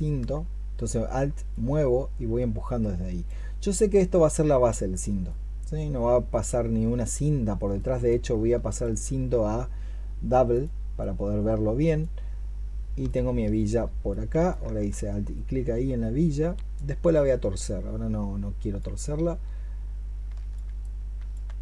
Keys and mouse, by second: 8.6 alt+click, 10.8 double click, 12.9 alt+click.